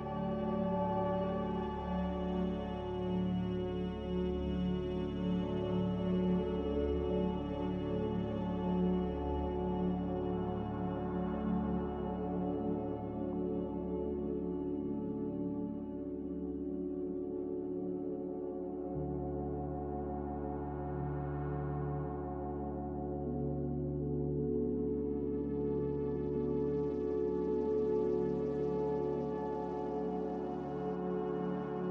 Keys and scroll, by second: 3.2 typing, 3.7 Return, 5.5 3, 5.5 0, 11.1 1, 11.3 5, 11.7 Return, 18.5 Return, 18.5 1, 18.5 0.